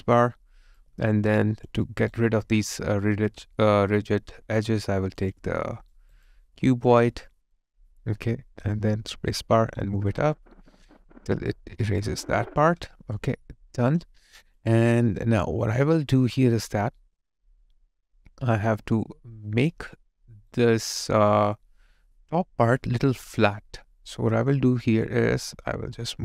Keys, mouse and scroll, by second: 0.8 alt+click, 1.9 alt+right click, 6.0 alt+right click, 6.3 alt+click, 13.2 alt+click, 14.3 alt+right click, 14.6 alt+click, 19.9 alt+right click, 20.8 alt+click.